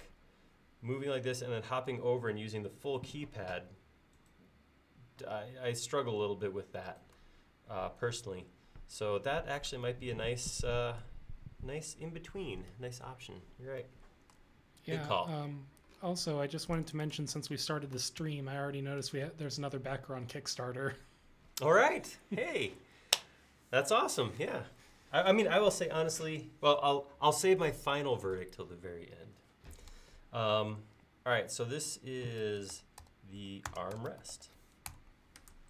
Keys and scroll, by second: 18.3 g, 32.2-34.9 typing.